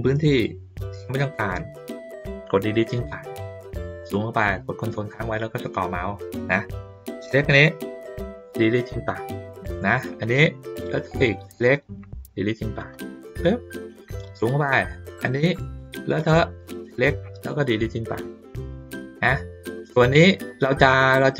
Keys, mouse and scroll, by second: 4.1 ctrl+middle click, 4.5 ctrl+middle click, 5.1 middle click, 7.1 click, 10.9 click, 14.1 ctrl+middle click, 14.5 ctrl+middle click, 15.8 click.